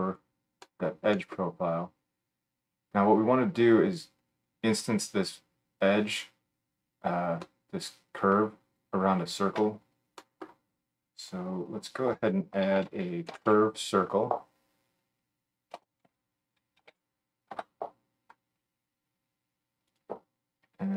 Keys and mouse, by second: 11.8 F3.